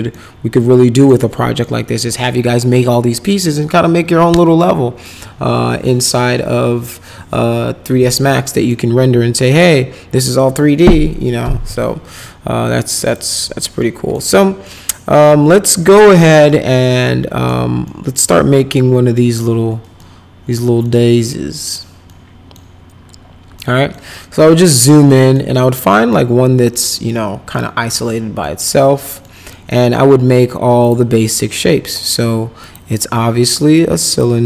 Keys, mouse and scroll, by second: 0.1 middle click, 1.2 middle click, 8.7-10.2 middle drag, 12.2 middle click, 12.9 right click, 13.8 middle click, 14.6 middle click, 15.7-17.4 middle drag, 17.9 middle click, 20.0 middle click, 20.8 middle click, 22.1 middle click, 23.5 middle click, 24.1 middle click, 24.5 middle click, 25.1 middle click, 25.9 middle click, 27.5 middle click, 28.4 middle click, 29.2 middle click, 30.8 click, 32.6 click, 34.1 click.